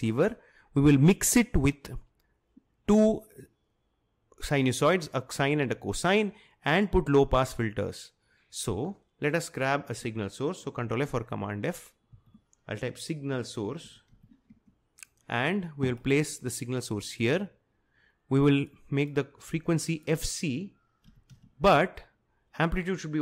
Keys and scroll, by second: 12.2 ctrl+f, 12.6-15.0 typing, 20.9-21.8 typing.